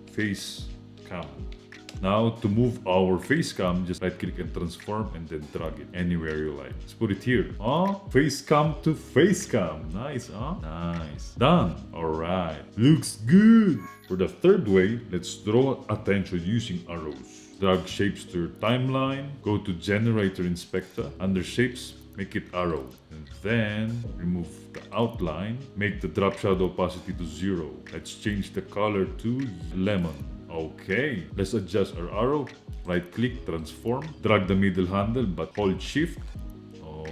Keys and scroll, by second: 0.0-2.1 typing, 11.9 space.